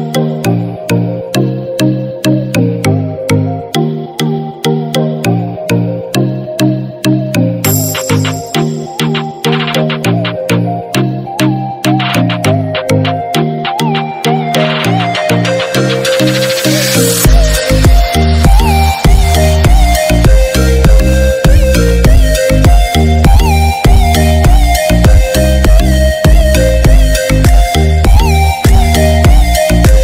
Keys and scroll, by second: 3.3 ctrl+=.